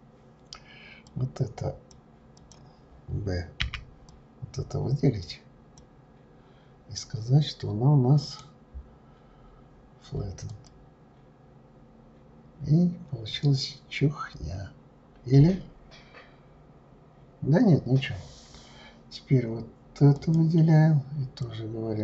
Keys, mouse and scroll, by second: 1.1 click, 2.3 click, 3.6 b, 8.2-11.2 right drag, 13.3-15.3 scroll down 3, 15.3-16.0 scroll down 1, 16.0-17.6 scroll down 1, 17.6-20.1 scroll up 6, 20.1 click, 21.4 click.